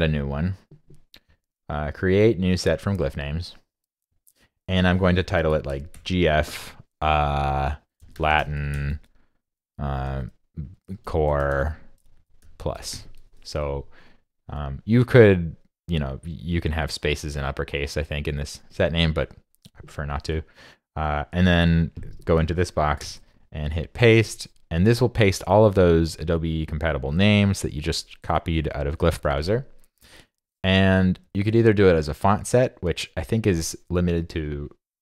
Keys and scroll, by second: 23.0 super+v.